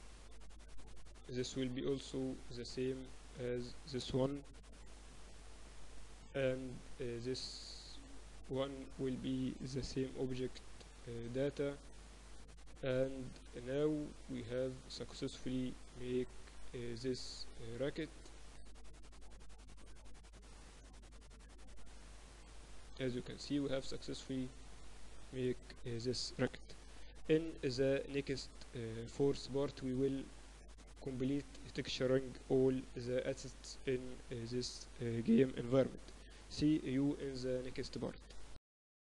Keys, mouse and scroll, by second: 0.0-1.5 drag, 0.8 z, 1.5-3.4 right drag, 3.8 z, 4.2-6.1 right drag, 5.0 ctrl+l, 7.6-11.4 right drag, 10.4 ctrl+l, 13.5-15.5 drag, 15.5-17.0 middle drag, 15.9-24.8 typing.